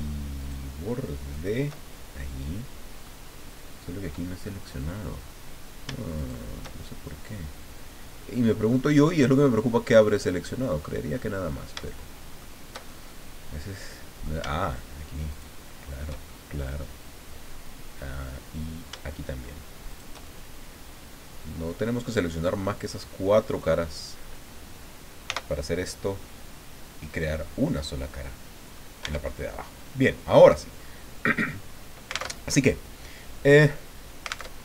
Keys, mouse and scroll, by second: 0.4 shift+right click, 1.3 shift+right click, 1.8-2.1 shift+scroll down 1, 2.2-3.2 middle drag, 3.3-3.6 scroll up 1, 6.2 shift+right click, 6.8 shift+scroll down 1, 7.1-12.6 shift+middle drag, 12.9-14.4 shift+middle drag, 15.3 shift+right click, 16.2-19.0 shift+middle drag, 19.9 shift+right click, 20.2-23.7 shift+drag, 25.2 f, 25.8-26.1 scroll down 2, 26.2-29.0 drag, 29.0 Tab, 29.3-29.7 scroll up 2, 29.7 scroll down 2, 30.3 click, 32.3 alt+Tab, 34.5 alt+Tab.